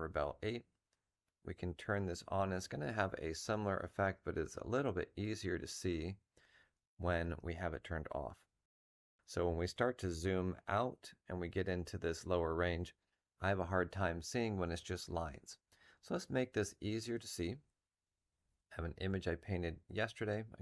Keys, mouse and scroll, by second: 17.5 F7, 18.8 double click.